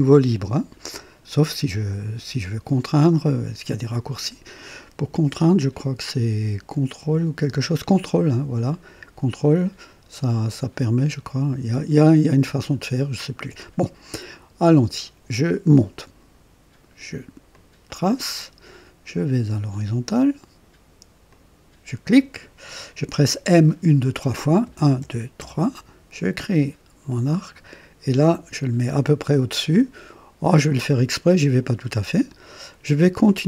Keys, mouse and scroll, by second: 17.5 ctrl+shift+click, 21.3 click, 24.6-25.4 typing, 31.8 click.